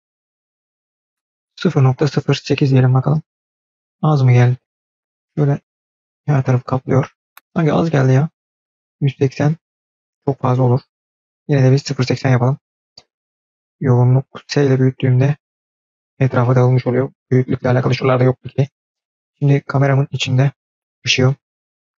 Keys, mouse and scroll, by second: 0.5 click, 0.7-2.6 drag, 4.8-5.9 scroll down 5, 5.1-6.1 middle drag, 8.0 click, 11.2 click, 19.4 click, 20.0 click, 20.7 click, 21.0 click.